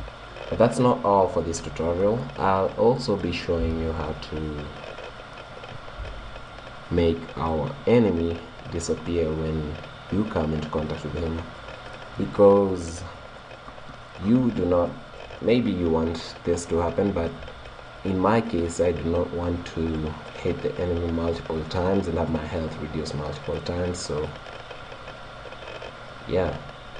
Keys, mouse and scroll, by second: 0.7 middle click, 1.4-4.7 middle drag, 4.7 click, 4.7 right click, 7.6 right click, 9.2-13.3 middle drag, 18.6-20.5 drag, 21.3-23.7 middle drag, 24.3-26.2 middle drag.